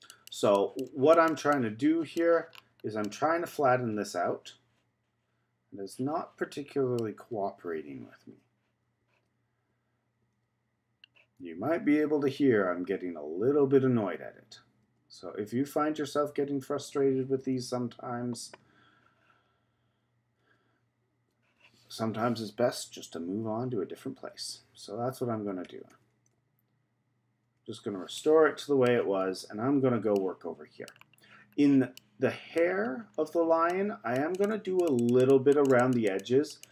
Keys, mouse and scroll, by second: 2.5-3.0 scroll down 3, 3.0-6.0 middle drag, 8.5 z, 9.8 z, 11.0 z, 12.2 z, 13.4 z, 14.4-18.5 typing, 19.8 z, 21.0 z, 23.5 z, 24.7 z, 26.0 z, 26.8 z, 28.2 z, 28.3 middle click, 29.2-30.1 scroll up 5, 30.1 middle click, 30.9-32.0 scroll down 3, 32.0-33.0 middle drag, 33.0-33.6 scroll up 2, 33.6-36.7 drag.